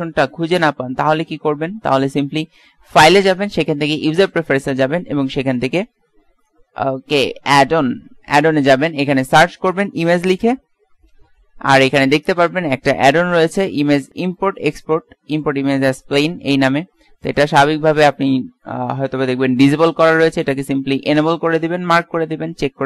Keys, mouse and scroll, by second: 4.6-7.5 drag.